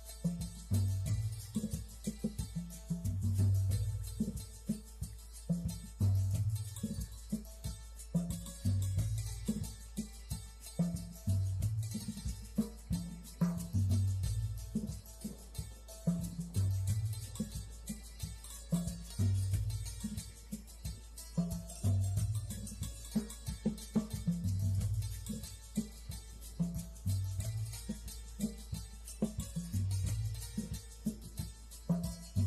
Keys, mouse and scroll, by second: 2.0 shift+a, 3.9 click, 7.6 g, 8.5 click, 10.6 click, 13.4 Tab, 13.9 click, 15.1 click, 16.8 click, 17.7 e, 18.8 click, 27.5 s, 29.7 click.